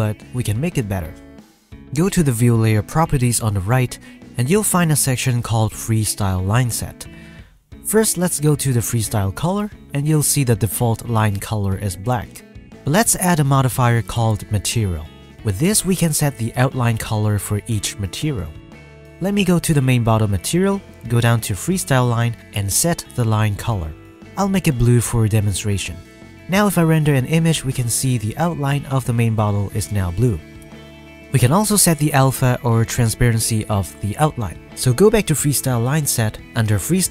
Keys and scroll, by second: 26.9 F12.